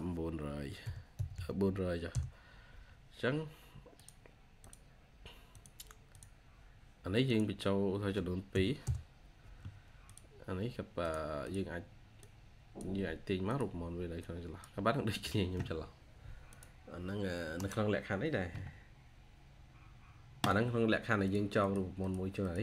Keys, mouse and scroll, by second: 0.5-1.7 typing, 2.0 Return, 8.4 typing, 8.7 Return, 11.3 double click, 17.4 right click, 21.5 double click.